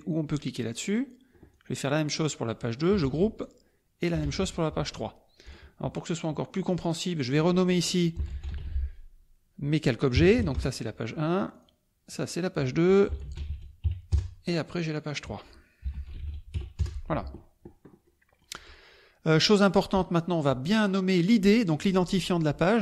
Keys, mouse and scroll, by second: 0.7 click, 1.5-2.3 drag, 2.5 click, 3.0 ctrl+g, 3.4-4.3 ctrl+drag, 4.2 ctrl+g, 4.7 ctrl+click, 5.4 click, 6.7 click, 7.9-8.8 typing, 10.1 KP_1, 10.5 Return, 11.5 click, 12.0 click, 13.1 p, 13.4 g, 13.8 KP_2, 14.9 click, 15.7-16.7 typing, 16.8 KP_Enter, 18.0 click, 18.6 middle click, 19.2 click, 19.5 click, 19.8-20.8 middle drag, 20.8 click, 20.9-22.6 middle drag, 22.6 click.